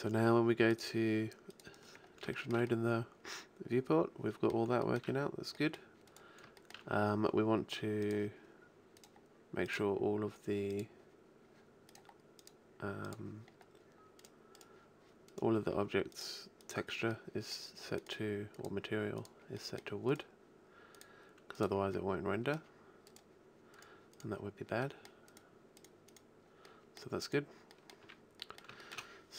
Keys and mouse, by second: 0.7-2.0 middle drag, 2.4-4.8 shift+middle drag, 6.0-8.0 shift+middle drag, 8.0-9.0 shift+drag, 9.0-10.5 shift+middle drag, 10.9-11.4 drag, 11.9-12.3 right drag, 13.5-13.9 middle drag, 13.9 drag, 14.3-16.1 right drag, 16.1-17.3 middle drag, 17.3-17.7 drag, 17.7-18.1 middle drag, 18.5 middle click, 19.5-19.9 middle drag, 19.9 click, 20.3 middle drag, 20.9 middle click, 21.9 middle drag, 22.0-22.9 drag, 23.9-27.7 middle drag, 27.7 middle click, 28.0-28.5 middle drag, 28.0 a.